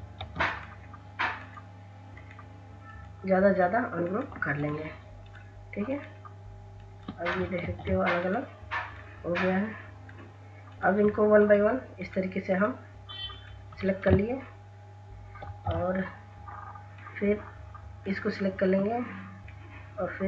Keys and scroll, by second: 6.9 ctrl+z, 14.8 ctrl+x.